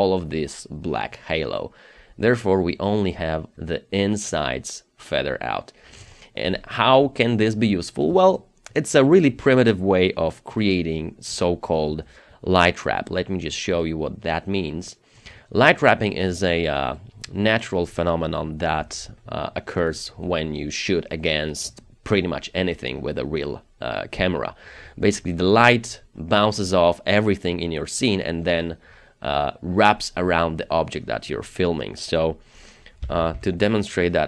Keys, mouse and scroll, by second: 1.3-2.9 scroll up 1, 5.3-6.8 scroll down 1, 16.4 double click, 18.9 Delete, 32.8-33.6 typing.